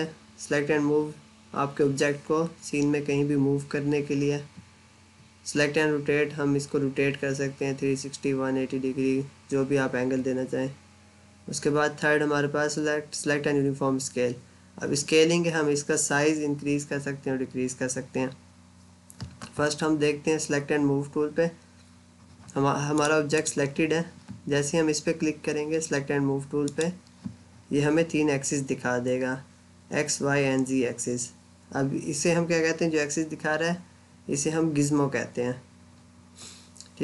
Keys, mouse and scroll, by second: 22.8 click, 26.5 click.